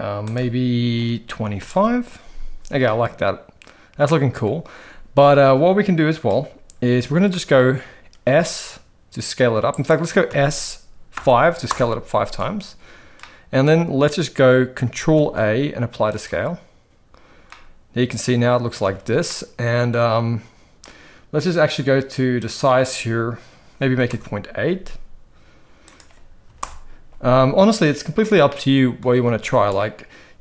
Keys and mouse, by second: 0.3-1.9 drag, 2.8-4.4 middle drag, 7.4 middle click, 8.2 s, 10.2 s, 13.2-13.6 middle drag, 15.1 ctrl+a, 17.5-18.7 middle drag, 18.8 alt+a, 19.3-20.8 middle drag, 22.4-24.3 drag, 26.0 click, 28.4-29.0 middle drag, 29.2 ctrl+z.